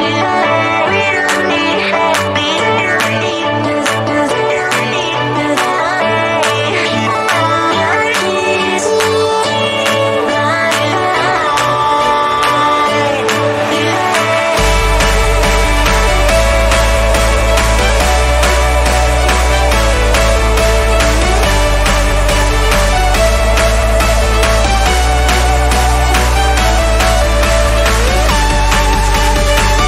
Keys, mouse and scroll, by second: 3.2 e, 3.9 click, 5.8 b, 6.2 click, 8.3 z, 8.4 right click, 8.6-11.8 drag, 11.8 right click, 12.4-14.0 drag, 14.0 e, 14.3-17.1 drag, 17.1 ctrl+z, 18.4-28.3 drag, 28.3 z, 28.4 right click, 28.9 click.